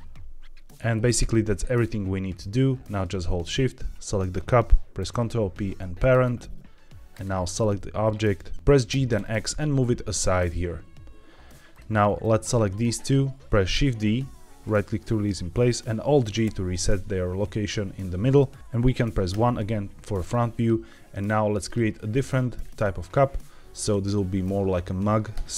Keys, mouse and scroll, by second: 0.8 Tab, 0.8-1.5 scroll down 3, 1.5 middle click, 3.4 shift+click, 4.9 ctrl+p, 7.0 click, 7.5-7.9 scroll down 2, 8.1 middle click, 8.5 Escape, 8.5 g, 8.5 x, 8.8 g, 9.1 x, 11.6 click, 12.1-12.7 drag, 13.7 shift+d, 14.6-15.1 right drag, 16.3 alt+g, 18.6 middle click, 19.2 KP_1, 20.0-20.5 scroll up 3, 21.4 click, 21.9 shift+middle drag, 21.9 shift+scroll up 1, 22.5-24.0 scroll up 1, 24.0-24.3 shift+middle drag, 25.3 Tab.